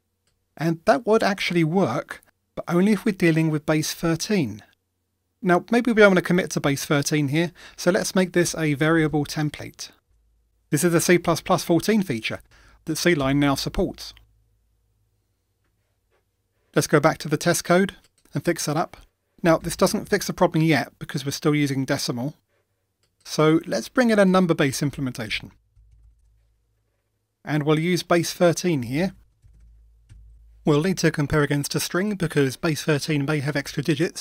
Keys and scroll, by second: 10.1 Return, 14.4 Escape.